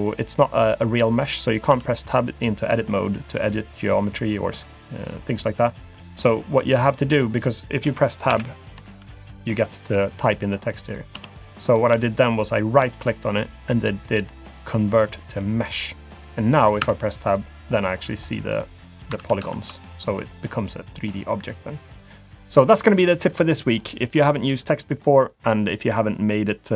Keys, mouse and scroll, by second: 1.7 Tab, 8.3 BackSpace, 8.9 shift+y, 11.2 Tab, 12.7 right click, 16.8 Tab, 17.3 click, 17.7 scroll up 1, 18.0 scroll down 1, 18.2-19.1 scroll down 1, 19.1 scroll down 1, 19.2 ctrl+z, 19.4 ctrl+z, 20.3-20.8 scroll down 2.